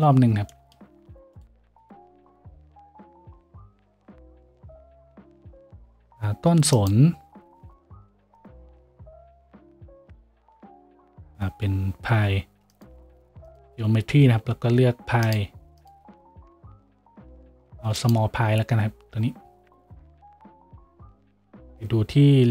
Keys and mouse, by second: 4.4 a, 5.1 z, 5.9 shift+a.